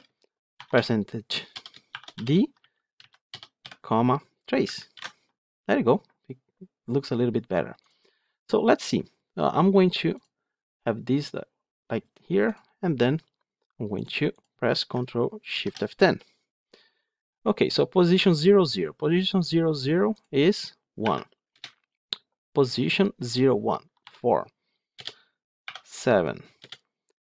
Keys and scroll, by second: 4.8 ctrl+alt+l.